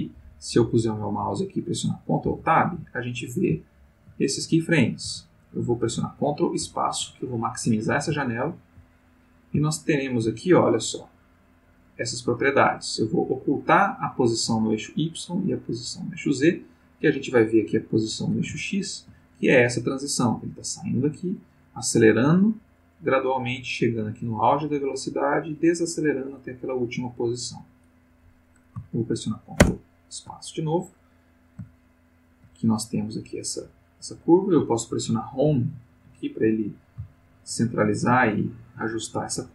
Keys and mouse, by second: 2.2 ctrl+Tab, 3.0 ctrl+middle click, 3.7 ctrl+middle click, 4.3 ctrl+middle click, 6.6 ctrl+space, 8.2 ctrl+middle click, 9.0 ctrl+middle click, 9.9 ctrl+middle click, 11.6 click, 14.8 click, 15.9 click, 17.4 click, 18.6 ctrl+middle click, 29.6 ctrl+space, 31.2-32.8 middle drag, 33.1 middle click, 33.8 middle click, 35.4 Home, 37.3 ctrl+middle click, 38.4 ctrl+middle click.